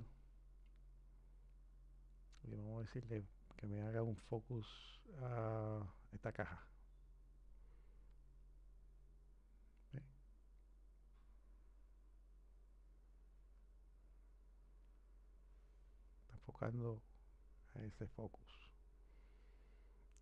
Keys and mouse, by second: 4.3 click.